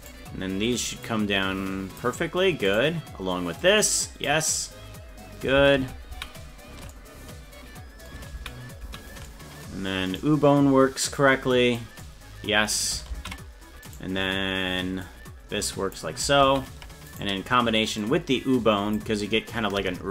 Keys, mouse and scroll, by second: 0.1 right click, 1.1-2.1 drag, 2.8 right click, 3.6 click, 5.8 ctrl+z, 6.2 ctrl+z, 8.4 ctrl+z, 9.1 ctrl+z, 10.2 right click, 11.2 click, 13.2 ctrl+z, 13.9 right click, 15.0 click, 16.5 ctrl+z, 17.1 right click, 18.0 click.